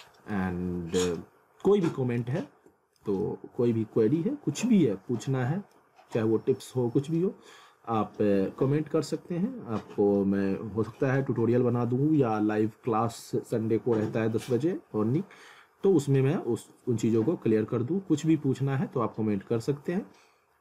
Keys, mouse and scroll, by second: 0.3 alt+middle click, 2.4 alt+middle click, 3.2 alt+middle click.